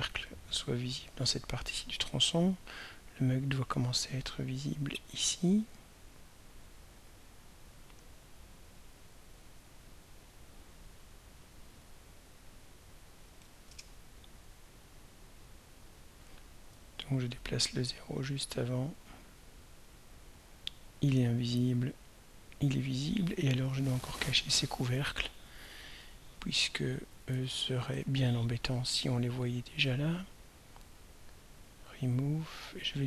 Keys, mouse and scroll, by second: 11.7 click, 12.2 click, 13.4 0, 13.7 Return, 16.1 click, 17.4 click, 19.9 click, 21.8 click, 28.0 right click, 31.6 click.